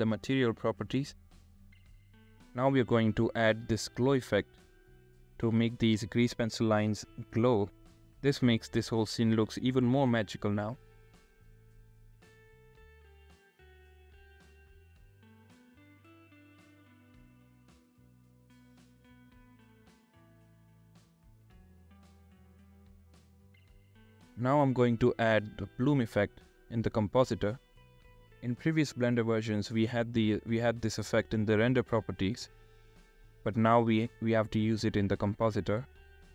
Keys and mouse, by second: 2.3-3.3 drag, 4.9-5.9 drag, 6.1-7.1 drag, 9.0-9.4 drag, 9.9-10.4 drag, 11.7-12.1 drag, 13.4 drag, 14.2 r, 14.2 z, 24.6 click, 26.9 click, 28.3-29.0 drag, 29.5 shift+a, 32.3-33.5 drag, 34.9 click, 35.7 click.